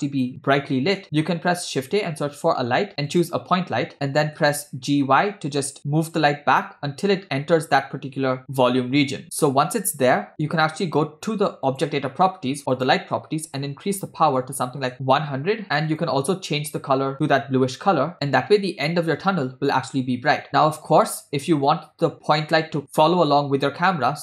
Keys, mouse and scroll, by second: 1.1 shift+a, 4.7 g, 11.7 click, 12.7-14.9 drag, 14.2 0, 14.9 Return, 16.1 click, 20.3 click, 20.5 scroll down 8.